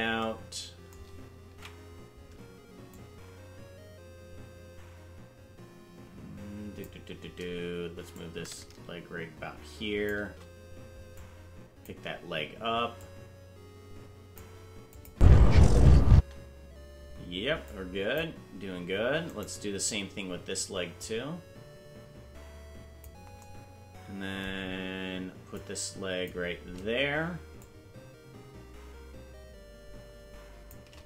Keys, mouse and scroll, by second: 1.5 ctrl+Tab, 2.9-6.9 drag, 8.1-10.1 shift+drag, 11.2 click, 12.9-14.4 drag, 14.9 click, 15.1 space, 16.1 space, 17.7 click, 19.3 right click, 21.0-23.1 drag, 25.5 click, 27.5-30.7 shift+drag.